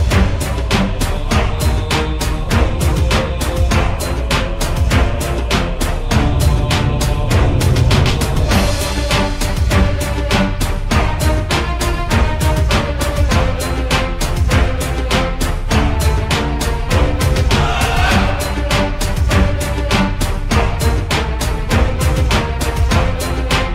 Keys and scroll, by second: 0.4 c, 1.4 l, 4.5-6.1 typing, 7.2-11.3 typing, 15.9 ctrl+z, 20.4 m, 22.2 t, 23.4-23.7 typing.